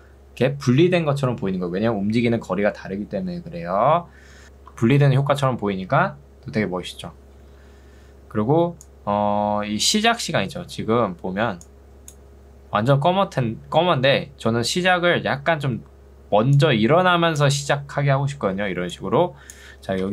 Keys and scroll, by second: 4.4 space, 18.6 ctrl+2.